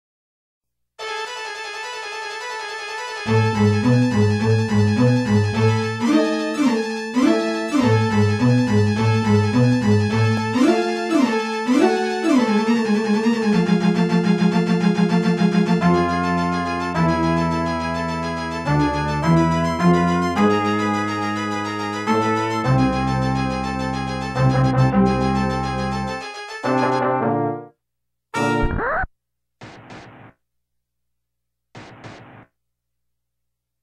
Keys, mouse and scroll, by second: 1.8 right click, 2.1 right click, 2.7 right click, 3.1 right click, 4.4 right click, 5.2 right click, 5.7 right click, 6.3 right click, 8.9 right click, 9.3 right click, 9.6 right click, 10.3 scroll up 3, 10.8 right click, 11.1 right click, 11.6 right click, 11.9 right click, 13.2 right click, 13.7 right click, 14.2 right click, 15.0 scroll down 2, 16.2-16.7 typing, 18.7 right click, 19.0 right click, 19.3 right click, 20.1 typing, 21.8 right click, 22.2 right click, 22.7 right click, 23.5-23.8 scroll down 2, 24.3 ctrl+s, 24.7 click, 25.6 scroll down 2, 26.4 ctrl+s, 27.7-29.2 typing, 30.8 ctrl+s, 31.0 click, 31.6 scroll up 2, 33.1 ctrl+s.